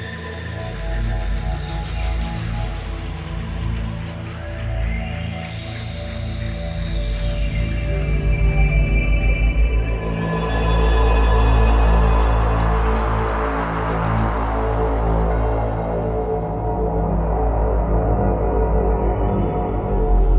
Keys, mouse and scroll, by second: 3.6 Escape, 4.0 middle click, 5.8-6.5 scroll up 8, 7.0 scroll up 1, 7.2 shift+middle click, 9.5 middle click, 12.2 scroll up 2, 12.5 scroll down 1, 12.8 scroll down 4, 13.8 KP_7, 15.0-15.4 scroll down 6, 16.0 shift+middle click, 17.4 KP_5, 18.3-18.7 scroll down 4, 19.4 click.